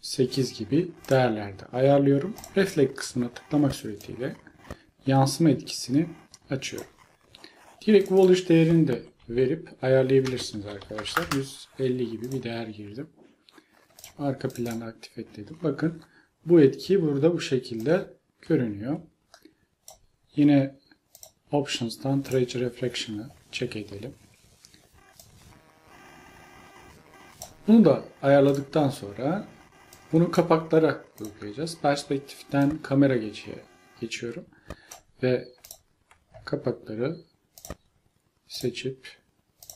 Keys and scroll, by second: 9.2 5, 10.3-11.0 typing, 11.3 Return.